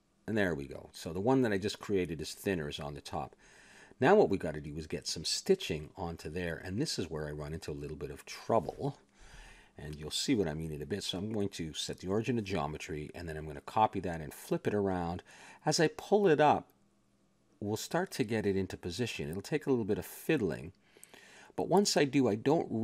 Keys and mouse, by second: 0.2 r, 1.5-2.6 middle drag, 5.0-6.9 middle drag, 6.9 a, 7.1-8.4 middle drag, 10.3 click, 10.9-12.4 middle drag, 12.4 click, 13.6 shift+d, 14.0 r, 16.1 click, 18.9-20.2 middle drag, 20.1 a, 21.3 click, 22.2 middle click, 22.7 g.